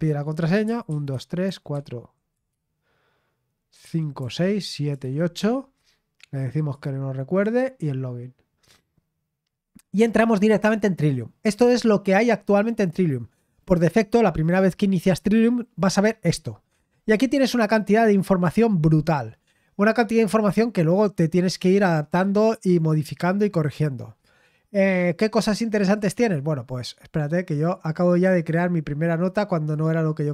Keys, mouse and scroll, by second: 0.6-1.5 typing, 4.1-5.3 typing, 6.5 click, 7.1-9.3 typing, 7.3 click, 25.9 click, 28.5-29.6 right drag, 29.6 click.